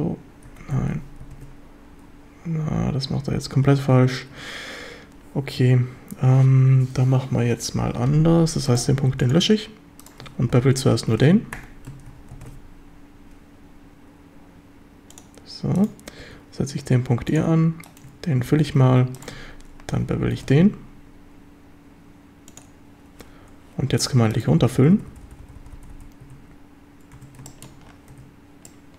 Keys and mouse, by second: 0.5 Escape, 1.2 ctrl+shift+b, 5.6 Escape, 5.6 a, 8.9 x, 10.5 ctrl+b, 11.6 Escape, 12.4 ctrl+shift+b, 15.1 click, 15.8 click, 16.2 e, 17.3 click, 18.8 a, 20.4 ctrl+shift+b, 22.5 click, 24.0 drag, 24.6-25.9 typing, 26.3 Tab, 27.2 Tab, 27.5 shift+drag, 28.7 Tab, 28.7-28.9 drag.